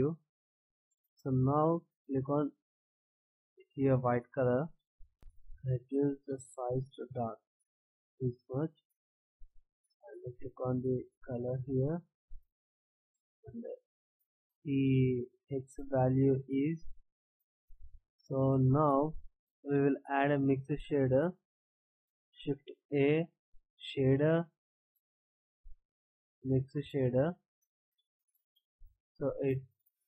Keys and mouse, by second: 22.8 shift+a.